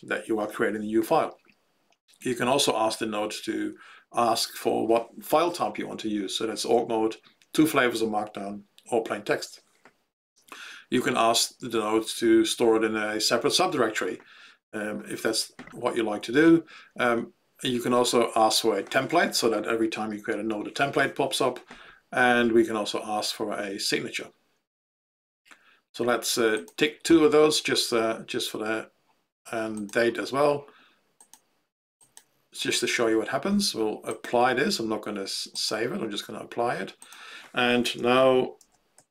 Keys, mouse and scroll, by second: 26.6 click, 31.2 click, 32.1 click, 34.2 click, 35.6 click, 36.9 click.